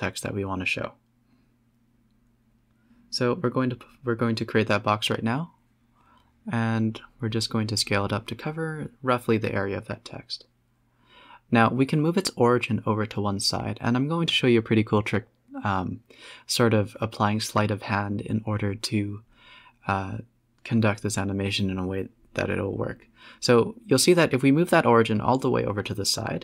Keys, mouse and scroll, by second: 0.0-0.4 middle drag, 0.4 scroll up 6, 0.7 g, 1.2 middle click, 1.8 click, 2.4 click, 3.2 middle click, 3.5 s, 4.5 g, 5.8 s, 8.6 alt+s, 9.1 Tab, 9.6 g, 11.5 Tab, 11.8 g, 13.5 s, 14.7 s, 18.4 z, 19.6-21.0 middle drag, 21.0 Tab, 21.2 Tab, 21.4 middle click, 21.5 z, 22.1 middle click, 22.6 s.